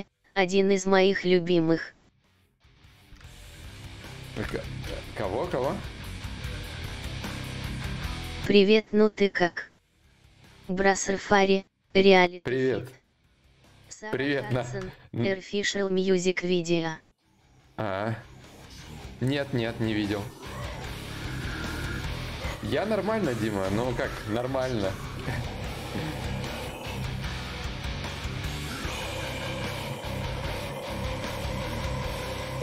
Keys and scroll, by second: 5.1 ctrl+z, 5.5 ctrl+z, 6.0 ctrl+z, 6.8 d, 7.2 d, 10.4 ctrl+z, 24.5 d.